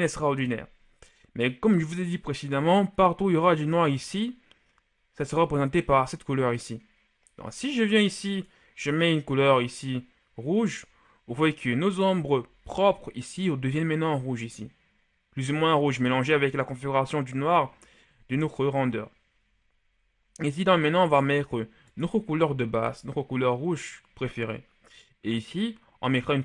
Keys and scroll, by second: 22.5 ctrl+v, 23.5 Return.